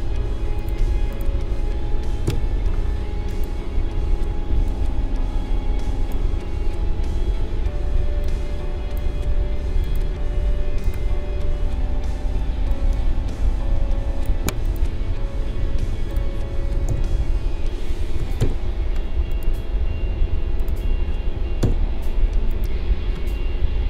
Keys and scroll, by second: 2.2 Right, 4.5 space, 16.8 Down, 21.6 Right.